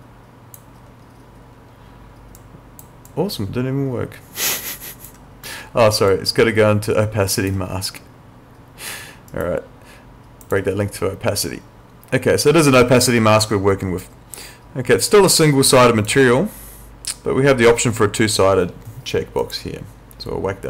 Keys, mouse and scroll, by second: 2.4 click, 6.1 click, 9.3 right click, 10.4 click, 19.4 click.